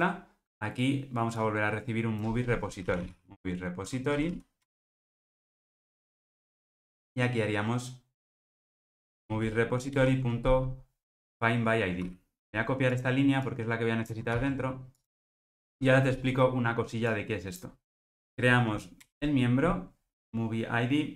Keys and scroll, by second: 4.6 Return, 9.9 Return, 12.0 super+z, 15.7 Return, 18.2 alt+Return.